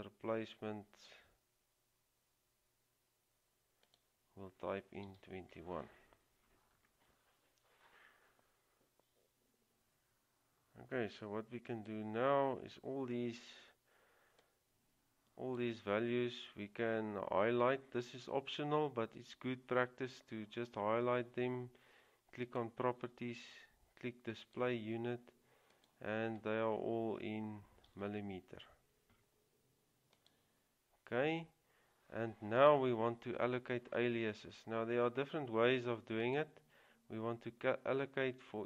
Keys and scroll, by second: 2.4 typing, 5.1 2, 28.0 typing.